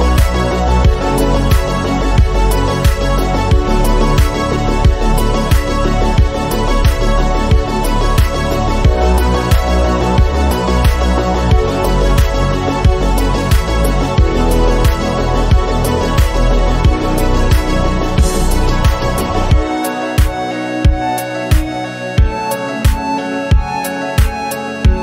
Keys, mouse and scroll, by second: 0.0 click, 0.7 KP_7, 1.1 g, 1.6 shift+middle click, 1.8-2.1 scroll up 1, 2.1 s, 3.6 g, 5.5 r, 6.4 g, 7.6-8.8 drag, 9.1 middle click, 9.8 KP_1, 10.3 click, 11.5 KP_7, 11.8-12.2 scroll up 2, 12.2 shift+middle click, 12.6 g, 13.6-14.8 drag, 15.3-16.4 scroll down 7, 15.7 click, 16.4-19.5 drag, 19.6 scroll up 2, 19.8 shift+middle click, 20.1 g, 21.7 scroll down 3, 22.0 a, 22.2 a, 22.5 s.